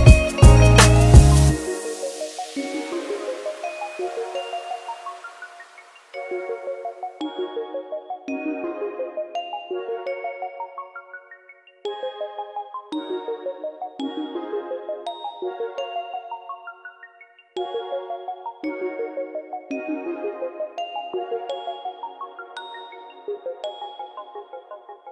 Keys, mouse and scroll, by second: 0.8 KP_1, 1.4 click, 3.1 KP_7, 3.9 s, 7.4 click, 8.1 click, 10.3 click, 12.2 click, 13.6-15.0 scroll down 17, 14.5 click, 16.5 click, 19.3 scroll up 2, 21.0 click, 21.0 scroll up 3, 21.4 click, 21.7 click, 22.0 click, 22.3 click, 23.0 click, 24.5 click, 24.8 click.